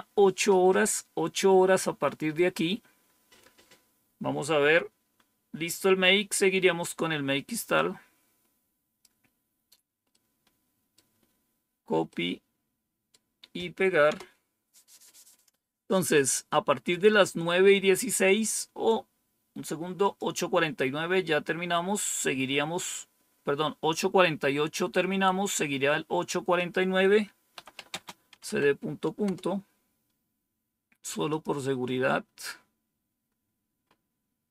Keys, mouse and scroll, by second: 5.9-6.4 scroll down 1, 6.4 scroll down 1, 7.7-9.0 drag, 10.0 right click, 12.0-13.1 right drag, 14.0 Return, 19.9 click, 21.9 click, 26.5 click, 27.3-28.4 typing, 29.2 Return, 31.2 click, 32.7-33.3 scroll down 3, 33.8 scroll up 2.